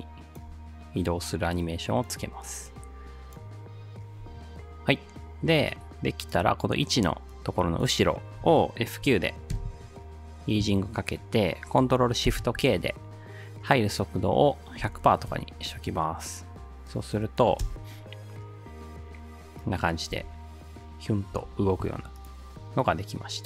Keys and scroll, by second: 9.5 F9, 12.3 ctrl+shift+k, 14.6-15.5 typing, 17.7 space, 20.1 space, 21.4 space.